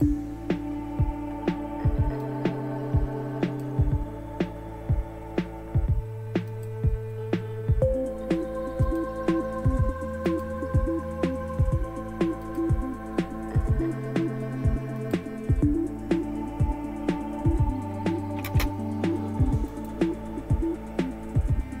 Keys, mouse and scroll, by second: 0.0 click, 2.2-3.7 drag, 6.5 click, 7.1 click, 8.8 click, 10.3 click, 12.4 click, 15.0 click, 18.4 space, 19.6 click.